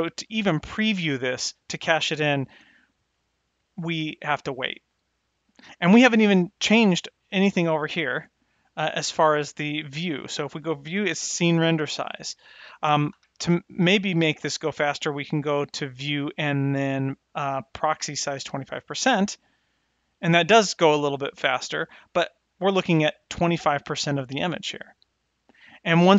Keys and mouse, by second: 9.1 n, 13.3 n, 14.9 click, 18.4 n.